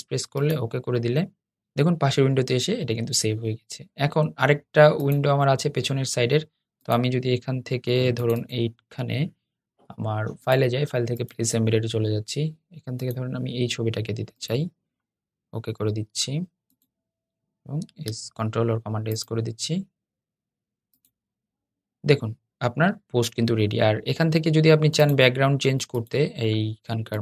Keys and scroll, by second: 17.6 super+s.